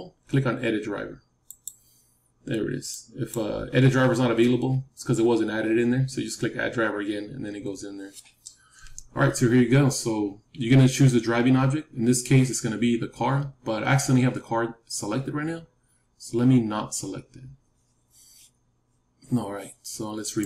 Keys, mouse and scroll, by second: 20.2-20.4 right drag.